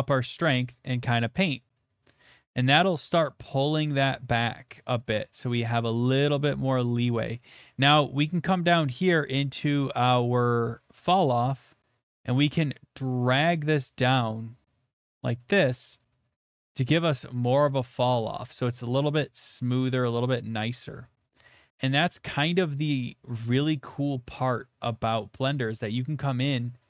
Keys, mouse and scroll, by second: 0.1 click, 0.6 click, 0.9 click, 1.2 click, 1.6 click, 1.9 click, 2.2 click, 4.1 click, 4.7 click, 5.2 click, 5.5 click, 5.8 click, 6.1 click, 6.5 click, 7.8-8.1 scroll, 8.7 scroll, 8.8 middle click, 8.8 middle click, 10.9 click, 11.3 middle click, 11.3 middle click, 11.3 middle click, 15.0 click, 15.6 click, 16.1 click, 16.2 click, 16.4 click, 16.6 click, 16.8 click, 17.1 click, 17.3 click, 18.0 click, 18.3 click, 18.8 click, 19.2 click, 19.8 middle click, 20.1 click, 20.6 middle click, 20.8 scroll, 21.0 middle click, 21.2 shift+middle click, 21.4 shift+middle click, 21.9 click, 25.1 click, 25.1 shift+middle click, 25.7 middle click, 26.0 shift+middle click, 26.5 middle click, 26.5 shift+middle click, 26.7 shift+middle click.